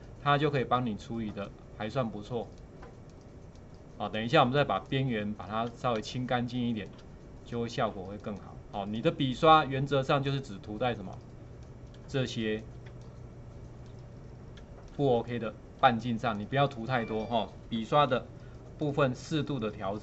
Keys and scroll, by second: 6.0 space, 12.1 space, 17.7 [, 18.1 [.